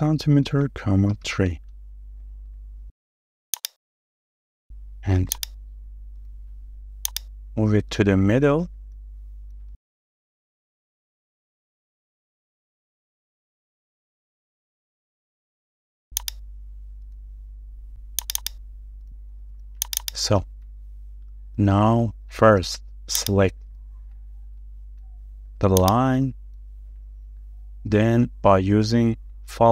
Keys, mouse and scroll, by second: 0.0-0.6 typing, 1.0 Return, 3.2 space, 4.7 m, 7.7-8.1 scroll down 1, 8.1 middle click, 8.9-9.3 scroll up 1, 9.3 middle click, 9.9 scroll up 1, 10.2 shift+middle click, 14.7 a, 18.4 double click, 20.0 double click, 20.7 scroll down 1, 21.0 middle click, 21.5 scroll down 1, 21.8 shift+middle click, 22.5 scroll up 1, 22.6 shift+middle click, 22.9 space, 23.6 scroll down 1, 23.9 shift+middle click, 24.3 scroll down 1, 24.6 shift+middle click, 26.6 scroll down 1, 26.9 shift+middle click, 27.7 scroll down 1, 28.0 shift+middle click, 29.5-29.7 shift+scroll up 2.